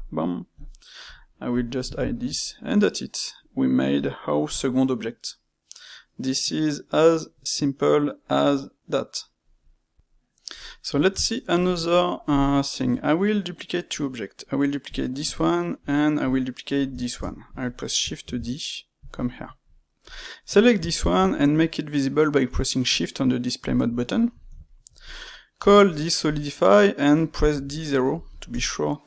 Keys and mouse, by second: 1.5 click, 1.9-5.4 ctrl+shift+middle drag, 9.9-12.3 middle drag, 12.3 drag, 12.6-14.8 ctrl+middle drag, 14.8 click, 15.7-16.6 middle drag, 16.6 shift+click, 16.9-18.1 ctrl+middle drag, 18.1 shift+d, 19.2-20.0 shift+middle drag, 20.0 click, 20.5-20.9 middle drag, 20.9 shift+q, 24.1-25.0 ctrl+middle drag, 25.0 click, 25.2 middle click, 25.5 space.